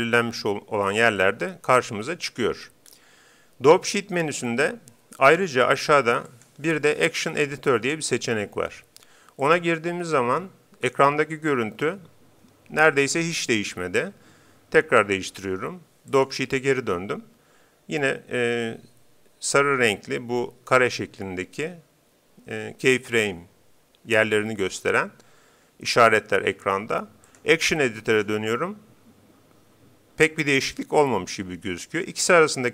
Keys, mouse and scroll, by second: 1.1-2.8 drag, 2.8-4.5 middle drag, 6.3-8.2 drag, 15.3-17.0 drag, 27.3-28.9 drag.